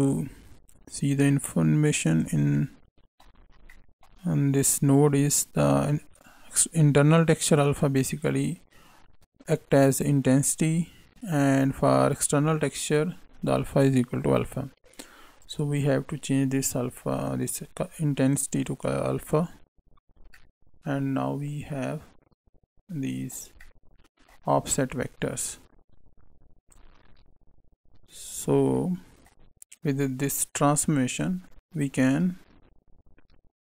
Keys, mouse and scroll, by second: 0.9 click, 2.5 middle click, 3.4 scroll down 1, 3.6 middle click, 15.3 click, 20.3 middle click, 23.5 middle click, 24.7 click, 28.2 click, 28.7 middle click, 30.2 click, 31.9 shift+a.